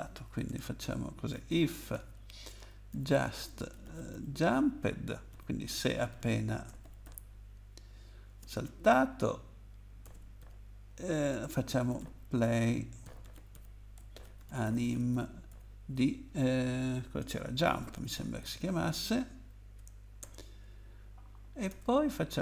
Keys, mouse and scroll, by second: 0.5 Return, 0.8-4.1 typing, 5.3-8.2 typing, 10.0 BackSpace, 11.3 Return, 12.0-15.5 typing, 18.0-18.9 typing, 20.2 Return, 21.7-22.4 typing.